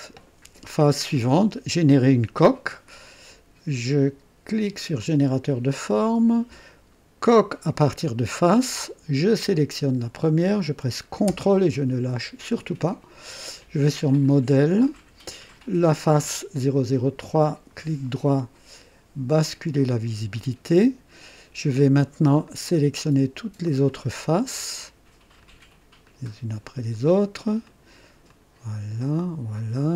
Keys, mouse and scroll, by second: 5.0 click, 7.2 click, 9.3 click, 14.6 ctrl+click, 17.7 ctrl+right click, 19.4 ctrl+click, 22.4 ctrl+click, 23.8 ctrl+click, 24.6 ctrl+click, 25.4 ctrl+click, 26.0 ctrl+click, 26.9 ctrl+click, 27.6 ctrl+click, 28.3 ctrl+click, 29.0 ctrl+click, 29.6 ctrl+click.